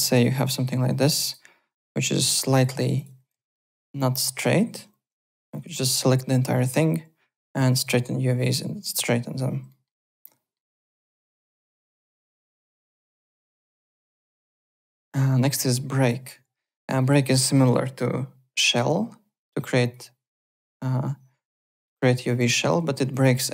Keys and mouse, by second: 0.3 click, 1.1 click, 2.0 click, 2.6-3.6 typing, 2.9 click, 3.4 alt+middle click, 3.6 alt+right click, 4.8-5.8 typing, 5.4 click, 7.7 click, 9.7 alt+middle click, 9.9 alt+right click, 10.2 alt+middle click, 11.0 alt+Tab, 15.4 alt+Tab, 15.9-16.9 typing, 16.0 click, 17.0 click, 19.8 click, 22.3 click, 22.8 3, 23.1 click.